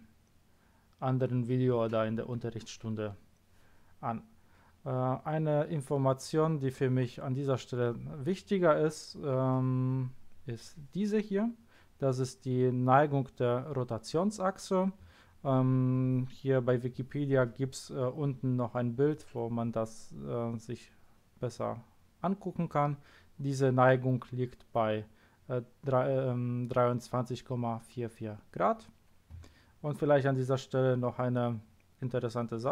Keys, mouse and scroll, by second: 4.5-6.2 scroll down 1, 6.2-9.4 scroll down 1.